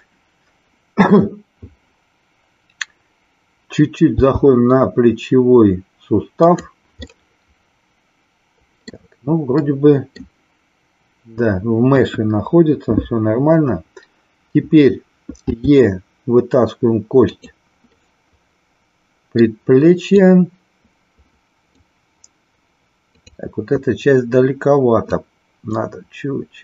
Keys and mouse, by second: 4.1 g, 7.1-9.1 middle drag, 9.6 middle click, 11.9 KP_1, 15.5 e, 17.3 click, 17.8-19.6 middle drag, 20.2-21.8 drag, 23.1 click, 25.0-26.6 drag.